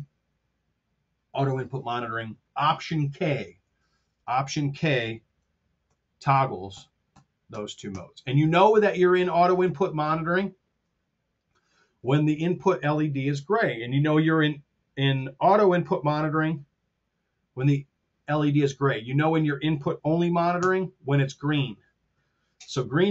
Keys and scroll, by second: 3.5 super+Tab, 5.8 alt+k, 20.5 alt+k.